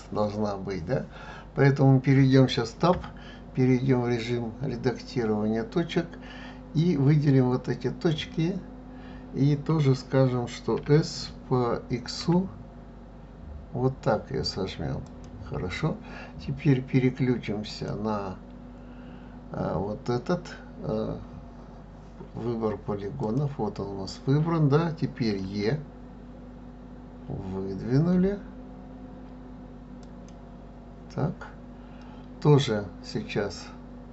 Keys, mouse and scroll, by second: 2.9 Tab, 6.8 click, 10.8 s, 17.7 click, 23.2 click, 25.4 e.